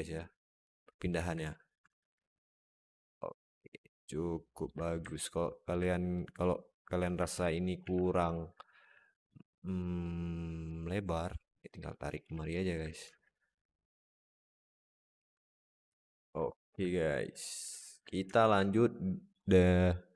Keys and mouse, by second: 0.0 middle click, 1.0 z, 1.7 Tab, 2.0 alt+z, 2.3-4.5 alt+middle drag, 5.0-5.5 alt+middle drag, 7.0 Tab, 7.4 alt+middle click, 7.7 alt+z, 8.2 shift+middle click, 8.4 alt+middle click, 9.3 click, 10.6 click, 11.7 alt+middle click, 12.1 alt+z, 12.4 alt+middle click, 12.9 Tab, 13.2-15.1 alt+middle drag, 15.8 alt+shift+middle click, 16.2-16.6 alt+middle drag, 17.6 alt+middle drag, 18.2 alt+shift+middle drag.